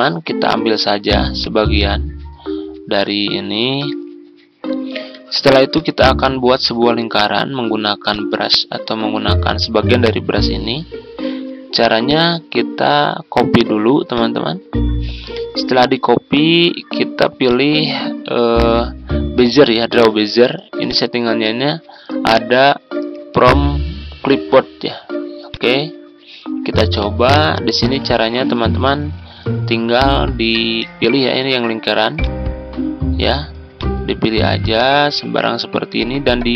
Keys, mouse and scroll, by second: 0.2 ctrl+scroll down 1, 1.3 click, 3.8 Delete, 4.8-5.7 ctrl+scroll down 1, 5.7-36.5 drag.